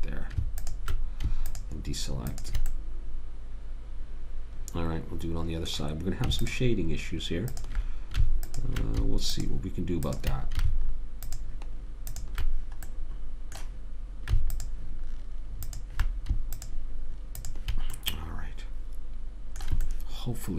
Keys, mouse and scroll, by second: 0.0 ctrl+z, 6.7-14.1 drag, 14.3 middle click, 14.8-19.3 drag, 18.5 middle click, 19.4 middle click.